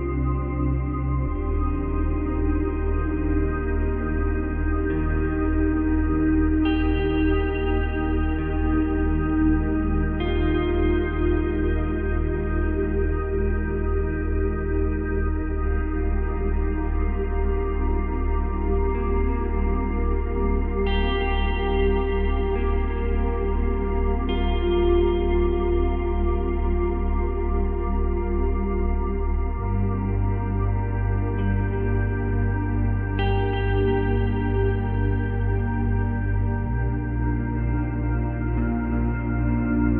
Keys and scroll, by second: 16.3 ctrl+c, 16.4 ctrl+v, 23.2 space, 24.0 space, 27.9 space, 28.8 space, 29.9 ctrl+c, 30.3 ctrl+v, 35.3 ctrl+c, 35.5 ctrl+v.